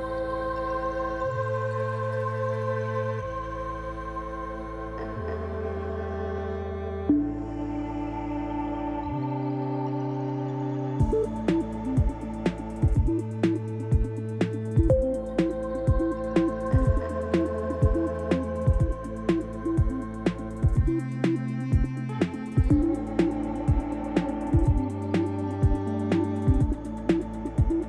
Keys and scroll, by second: 11.1 5, 11.7 Return, 15.3-16.1 typing, 17.5 l, 18.5 Return.